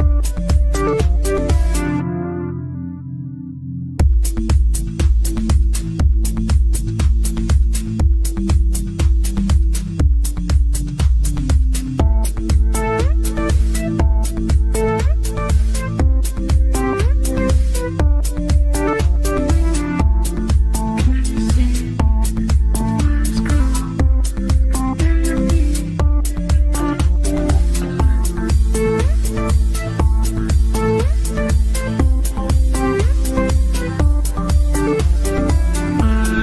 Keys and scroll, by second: 32.6 ctrl+q.